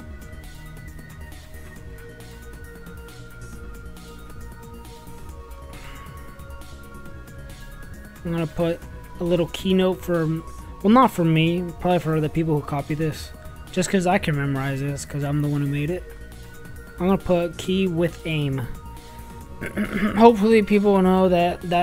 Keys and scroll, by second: 0.0-2.4 typing, 3.7 s, 10.0 shift+l, 11.4 shift+p, 12.1 shift+0, 12.9 shift+9, 14.8-16.4 typing, 17.6-19.2 typing.